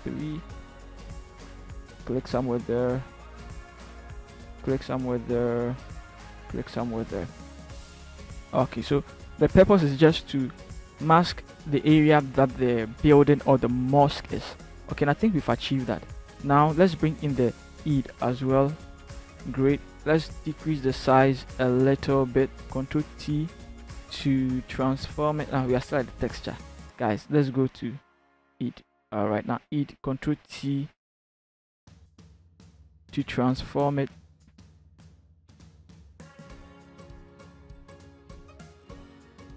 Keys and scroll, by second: 20.4 ctrl+t, 24.3 ctrl+t, 25.9 Return, 30.3 ctrl+t.